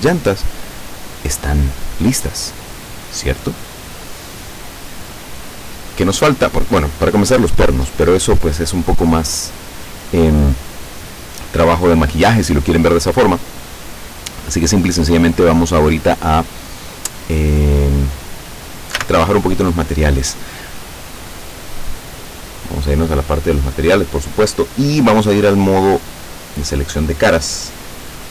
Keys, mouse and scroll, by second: 19.1 a, 22.1 click, 26.1 click.